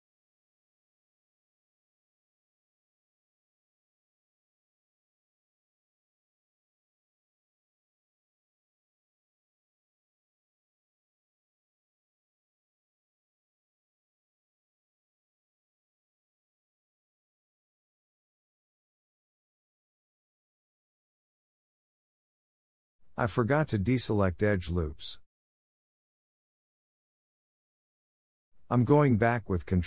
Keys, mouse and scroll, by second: 0.1-1.1 right drag, 1.1-2.9 shift+middle drag, 2.9 click, 3.8 click, 4.9-6.0 drag, 6.5 click, 6.8 shift+middle drag, 7.0 scroll up 1, 7.2 middle drag, 7.5 Tab, 7.9-9.4 scroll up 3, 9.4 shift+middle click, 9.5-10.1 scroll up 1, 10.1 2, 10.6 e, 11.8 1, 12.3 click, 12.6 scroll down 2, 12.7-15.3 middle drag, 15.3 KP_7, 15.9 e, 17.6 s, 18.7 g, 19.8 Tab, 20.0 click, 20.2 scroll down 2, 20.3-22.0 middle drag, 22.0-22.4 scroll down 5, 22.4 Tab, 22.9 1, 23.4 shift+middle click, 23.7-24.2 scroll up 1, 24.2 shift+middle click, 24.4-24.9 scroll up 3, 24.9-27.5 middle drag, 27.5 click, 27.9 l, 29.5-29.8 middle drag.